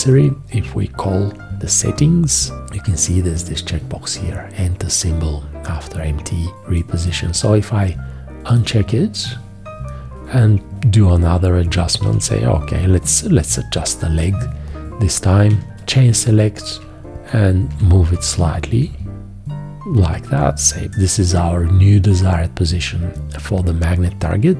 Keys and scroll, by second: 12.1 v, 15.4 1, 16.8 Left.